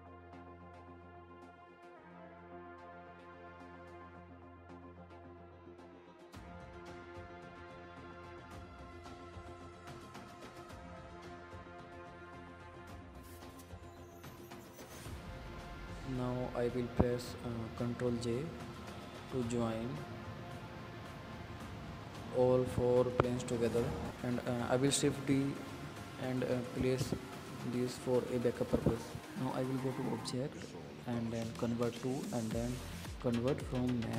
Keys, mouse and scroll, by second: 2.1 click, 3.7 click, 6.2 alt+d, 10.3 g, 11.4-13.0 drag, 13.5 click, 13.9 scroll down 2, 14.1 click, 14.3-15.1 scroll up 1, 15.1 alt+d, 16.4 g, 17.4-18.9 drag, 19.7-21.2 drag, 21.3 click, 21.6 scroll down 3, 21.9 scroll up 2, 22.0 click, 23.5-24.4 drag, 24.4 ctrl+j, 24.9 click, 25.0-25.5 scroll down 2, 25.5 click, 25.8-27.2 right drag, 27.2 click, 28.2 shift+d, 28.8 click, 29.1 click, 29.5 KP_Decimal, 30.5-32.0 drag, 32.6 click, 32.9 drag, 33.1-33.7 scroll down 7, 33.7 middle click.